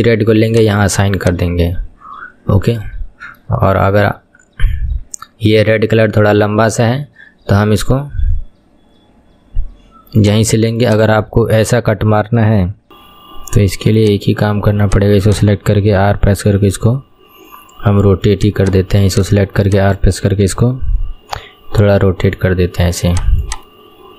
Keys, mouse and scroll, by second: 0.6 click, 3.7-10.5 shift+middle drag, 10.5 click, 11.0 click, 12.6 scroll up 1, 12.9-14.1 shift+middle drag, 14.1-14.9 drag, 16.1 r, 18.7 click, 19.2 click, 19.8 shift+click, 20.6 r, 23.5 click, 23.8-24.1 middle drag.